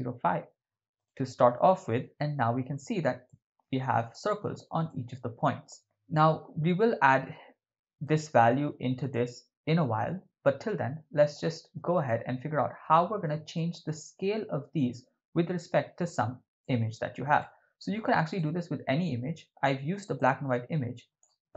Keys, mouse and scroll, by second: 1.0 click, 1.5 click, 2.1-2.9 middle drag, 3.2-3.6 ctrl+middle drag, 4.1 shift+middle drag, 4.9-6.1 ctrl+middle drag, 8.1 click, 9.0 click, 11.3-11.9 shift+middle drag, 12.1-12.6 ctrl+middle drag, 13.0 shift+middle click, 13.6 ctrl+middle click, 16.6 middle click, 17.4 ctrl+middle click, 18.4-21.2 drag.